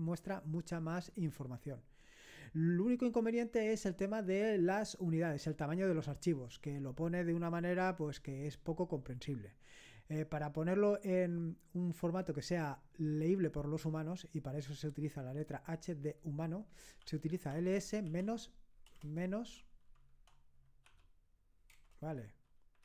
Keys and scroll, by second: 17.0-18.9 typing, 20.9 typing.